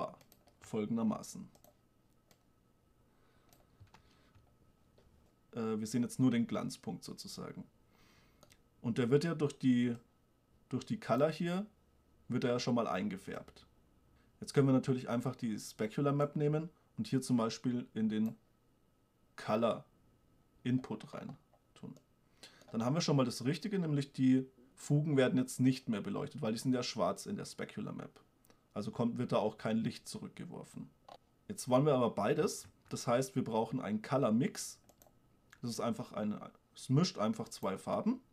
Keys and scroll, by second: 1.4 g, 4.2 shift+space, 32.9 shift+a.